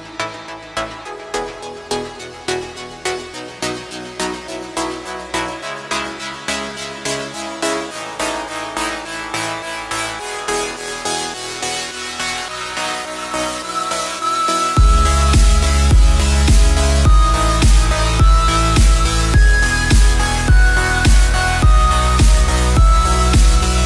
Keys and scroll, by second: 0.0 F7, 1.7 F7, 3.7 ctrl+space, 4.1 ctrl+space, 7.1 space, 19.7 space, 21.5 space, 23.0 9, 23.5 Return.